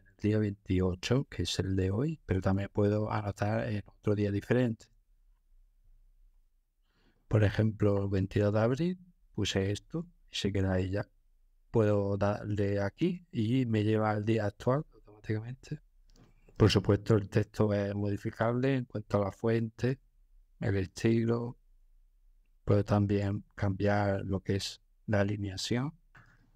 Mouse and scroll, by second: 2.2 click, 4.7-5.6 scroll, 8.2-9.2 scroll, 9.3 click, 12.9-13.8 drag, 16.4-17.4 scroll, 18.1-22.0 drag, 22.9 click, 26.1 click.